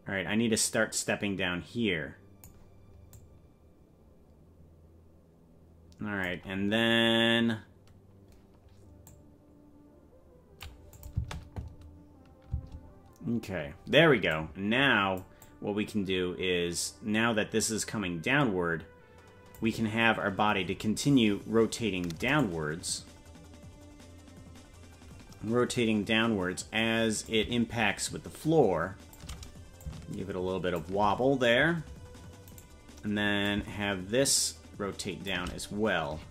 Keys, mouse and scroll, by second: 3.1-6.3 drag, 9.1-10.7 drag, 11.0 click, 11.2 space, 14.3 click, 15.4-19.6 drag, 22.4 right click, 27.2-29.2 drag, 29.8-30.9 drag, 32.6 right click, 33.4-35.4 drag.